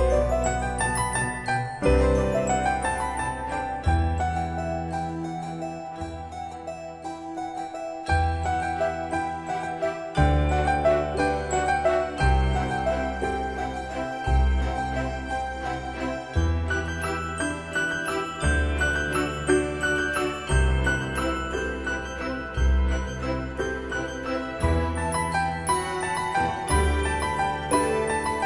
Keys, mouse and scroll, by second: 3.2 typing, 7.8 click, 9.9 F8, 12.1-13.5 typing, 14.1 Return, 16.1 space, 16.5 m, 17.3 click, 22.0-23.5 scroll up 1, 27.5 click.